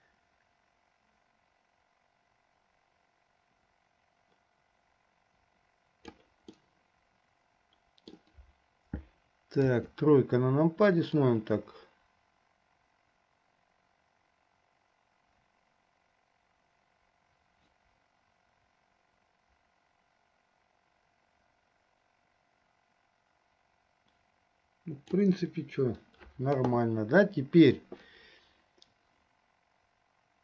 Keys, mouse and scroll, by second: 6.8-8.5 middle drag, 9.7 KP_3, 11.4-25.4 drag.